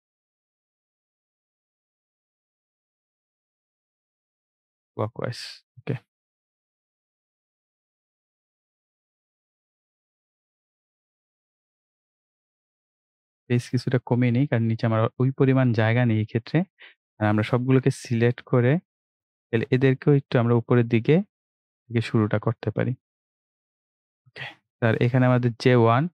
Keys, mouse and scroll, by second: 14.3 scroll down 1, 15.4-16.1 scroll up 1, 16.7-24.3 drag.